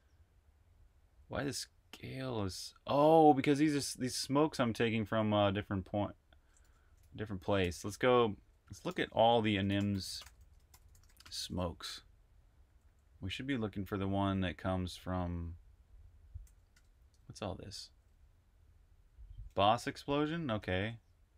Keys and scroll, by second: 0.4-4.7 typing, 6.4 super+`, 6.4-7.6 typing, 8.7 shift+super+f, 9.4-14.0 typing, 16.2-21.3 typing.